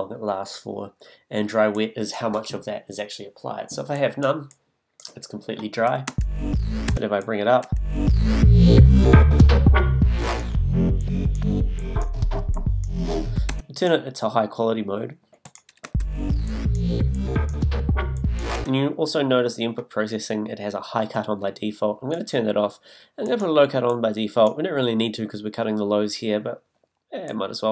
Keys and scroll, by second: 6.1 space, 13.5 space, 15.8 space, 18.5 space.